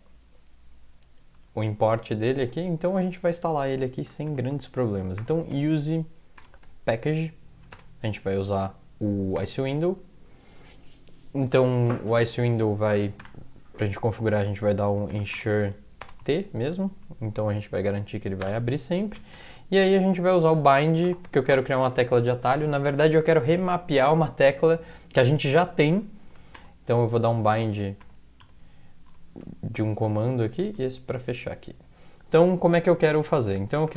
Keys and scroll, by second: 1.6 alt+Tab, 4.3-6.6 typing, 7.1 Tab, 7.7 space, 9.4 ctrl+y, 13.2 Return, 14.8-16.2 typing, 18.4-19.3 typing, 20.7-21.9 typing, 26.6 typing, 29.1 typing, 30.6 typing, 31.1 Left, 31.3 Left, 31.4 Left.